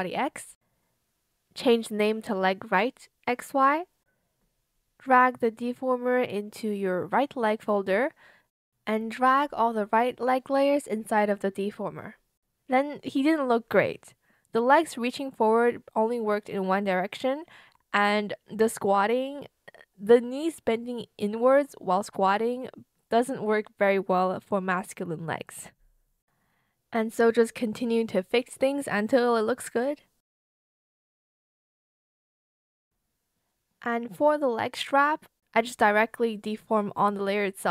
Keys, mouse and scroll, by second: 3.8 BackSpace, 4.2 r, 4.3 Return, 9.6 shift+click, 10.7 shift+click, 25.6 ctrl+shift+c, 25.8 ctrl+shift+v, 28.1 shift+click, 30.8 ctrl+shift+c, 30.9 ctrl+shift+v, 31.9 shift+click, 34.0 Return, 35.5 shift+click, 36.7 shift+click, 37.2 shift+b.